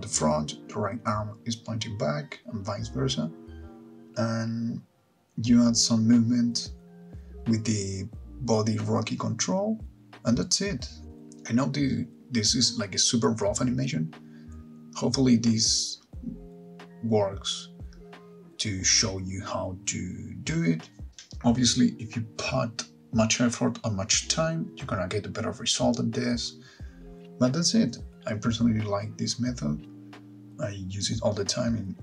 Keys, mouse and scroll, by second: 10.0-14.3 typing, 10.1 Right, 10.1 alt+g, 10.2 click, 10.4 shift+click, 10.6 click, 10.6 middle click, 10.6 scroll down 11, 10.7 scroll up 9, 10.8 click, 11.0 click, 11.0 shift+click, 11.0 middle click, 11.2 Right, 11.2 middle click, 11.2 click, 11.4 middle click, 11.5 middle click, 11.6 click, 11.7 click, 11.7 middle click, 11.8 Right, 11.8 click, 11.9 Left, 11.9 shift+middle click, 12.0 middle click, 12.1 ctrl+click, 12.2 Right, 12.5 ctrl+click, 12.6 middle click, 12.6 shift+click, 12.7 click, 12.8 Right, 12.8 click, 12.9 click, 12.9 scroll down 7, 13.0 middle click, 13.1 click, 13.2 shift+middle click, 13.3 middle click, 13.3 scroll up 3, 13.4 click, 13.5 middle click, 13.5 click, 13.7 ctrl+click, 13.8 click, 13.9 click, 14.0 click, 14.0 middle click, 14.0 scroll down 2, 14.1 click, 14.3 click, 14.3 shift+middle click, 14.4 shift+middle click.